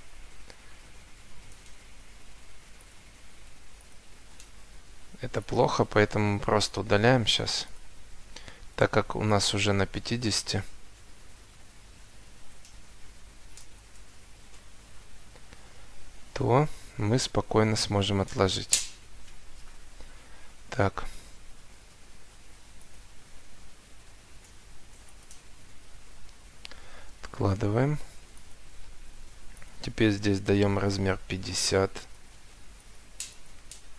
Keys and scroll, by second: 1.9 Escape, 4.8 Escape, 5.9 Delete, 17.8 Escape, 19.7 Delete, 28.6 Escape.